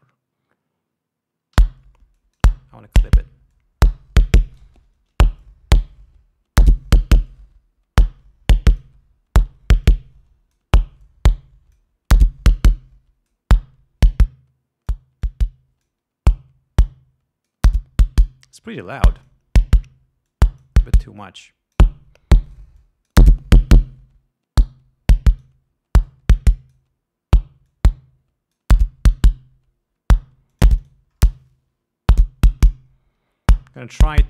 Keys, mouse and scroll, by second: 1.8 l, 2.4 click, 3.8-5.0 drag, 5.7-7.1 drag, 7.5-9.2 drag, 10.1 click, 11.3 click, 12.8 click, 14.4 click, 15.5 click, 17.1 click, 18.5-19.7 drag, 20.6 click, 21.5 click, 22.7 right click, 23.1 click, 24.0-25.9 drag, 26.4 click, 28.1-29.1 drag, 30.9 click, 32.5 right click.